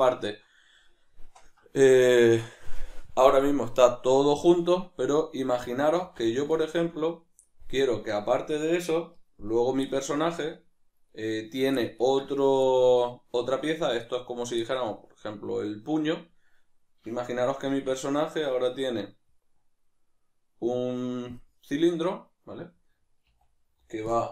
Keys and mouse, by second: 7.9 right click, 9.9-24.3 shift+middle drag, 17.7 shift+a.